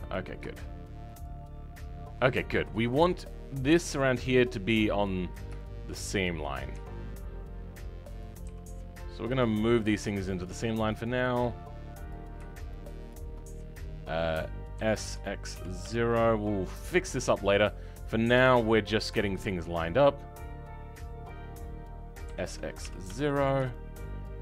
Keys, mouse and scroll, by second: 6.7 r, 10.8 shift+click, 14.8 s, 21.2 click, 22.3 s, 24.2 shift+click.